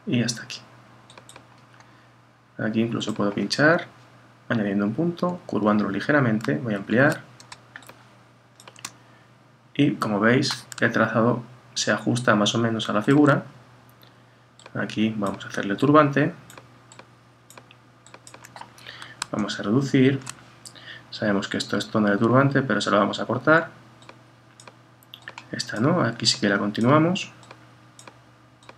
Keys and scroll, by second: 6.8 super++, 19.4 super+-.